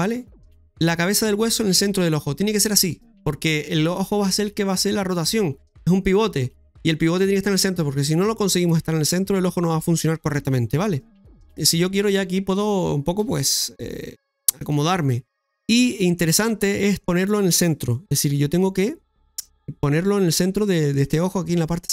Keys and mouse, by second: 1.7 middle click, 11.3 KP_3, 12.1 right click, 14.3-15.1 typing, 14.8-16.1 middle drag, 16.4 shift+middle click, 19.5-21.1 middle drag.